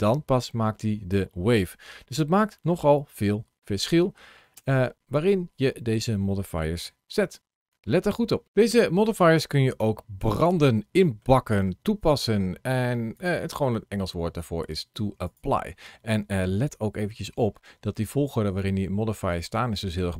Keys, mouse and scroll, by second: 4.4 space, 9.3-9.9 scroll down 1, 9.9-10.2 scroll up 2, 10.4 middle click, 11.5 middle click, 13.0 click, 13.6 middle click, 15.1 click, 17.5 ctrl+shift+a.